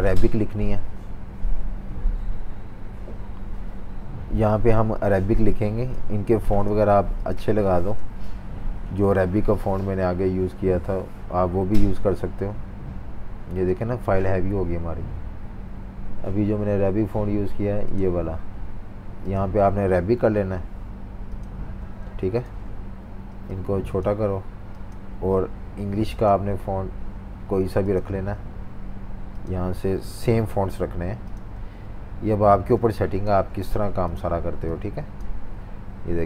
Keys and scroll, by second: 20.1 i, 21.8 v, 30.1 i, 31.6 typing.